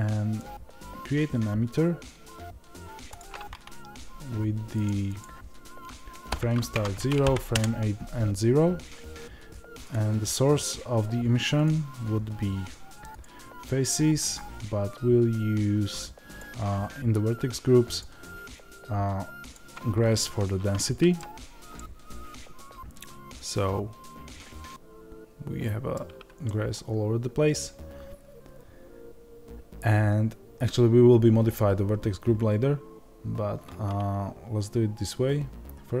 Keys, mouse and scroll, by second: 7.5 KP_Enter, 20.2-36.0 middle drag, 21.1 scroll down 2, 21.2-21.7 scroll up 2, 25.9-26.4 scroll down 2.